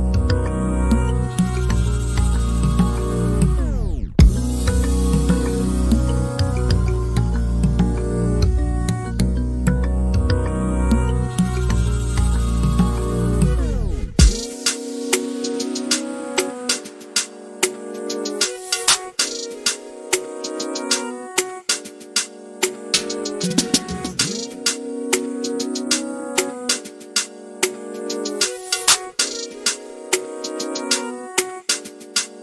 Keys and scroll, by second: 0.3 p, 6.1 m, 7.8-8.3 typing, 10.8-15.4 typing, 16.8-17.5 typing, 23.5 t, 24.9-26.7 typing, 28.1-29.9 typing, 31.3 f.